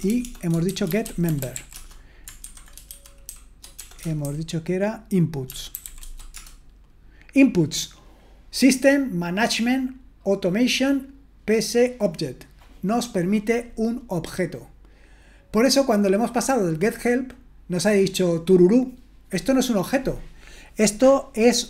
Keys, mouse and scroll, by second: 0.0-6.8 typing.